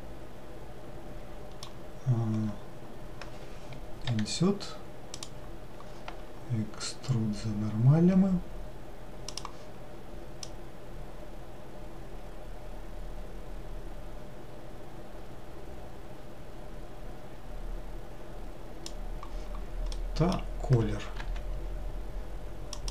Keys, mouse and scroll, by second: 9.5-12.0 drag, 21.4 g.